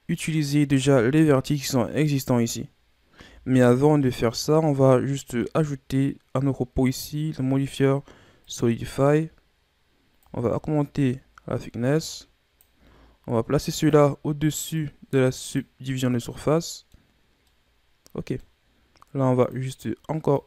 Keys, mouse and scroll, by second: 0.9 Tab, 3.2 Tab, 3.9-5.1 scroll down 4, 5.1 scroll up 1, 5.4 right click, 6.9-9.9 drag, 10.2-13.3 drag, 13.8-15.6 drag, 16.3-19.4 middle drag, 19.4-20.4 drag.